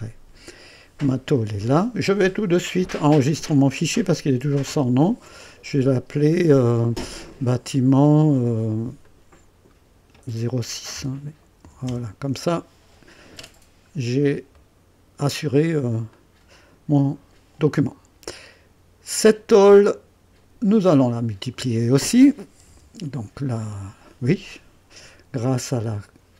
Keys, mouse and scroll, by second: 0.6 click, 5.0 ctrl+s, 7.3 click, 9.0 click, 10.9-23.5 typing, 11.8 Return, 11.8 KP_Enter, 13.5 scroll up 1, 14.5-15.2 right drag, 15.4-15.8 scroll down 2, 16.1-19.4 drag, 19.7-20.8 drag, 23.5-24.3 right drag.